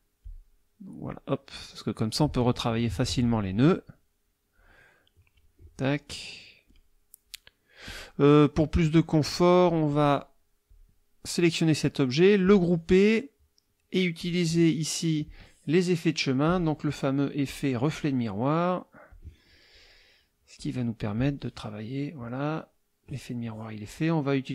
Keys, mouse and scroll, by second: 0.2 click, 1.5 click, 3.0 ctrl+click, 3.7 ctrl+click, 5.8 click, 7.3 click, 9.7-10.2 drag, 10.7 click, 12.5 click, 14.2 click, 15.2 click, 16.5 click, 17.4-18.1 drag, 19.1 click, 20.6 click, 21.1 click.